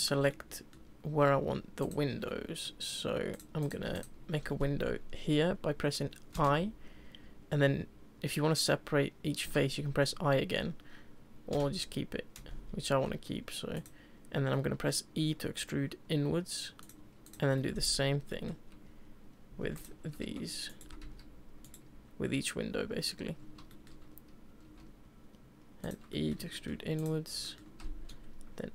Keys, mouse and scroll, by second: 0.3-1.8 middle drag, 1.8 shift+click, 2.3-3.3 middle drag, 3.3 click, 3.6 click, 3.9 shift+click, 4.4-4.9 scroll up 2, 4.5-4.8 middle drag, 14.5-15.2 middle drag, 15.2 e, 17.2 click, 17.6-18.7 middle drag, 20.2 s, 20.8 s, 23.7-24.6 shift+middle drag, 24.6 e, 26.1-27.0 middle drag, 27.0 click, 27.4-28.7 shift+middle drag.